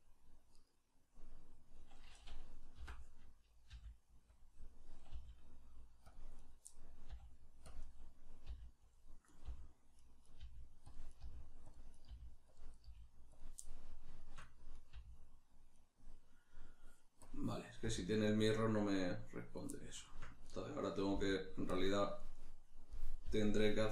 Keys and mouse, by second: 0.7 right click, 2.8 o, 4.3 click, 4.5-6.1 middle drag, 5.1 g, 6.1 click, 6.4 right click, 7.1 middle click, 7.1 g, 7.7 click, 7.8-8.9 middle drag, 8.5 g, 8.9 click, 9.3 right click, 9.5-12.9 typing, 10.3 right click, 10.9 click, 11.1 right click, 11.7 click, 11.9 right click, 12.6 click, 12.7 right click, 13.4 click, 13.6-14.7 middle drag, 14.7 right click, 14.9 g, 15.9 right click, 17.8 g, 18.8 click, 19.7-21.7 middle drag, 21.1 g, 21.7 click, 21.8-23.9 middle drag, 23.2 g.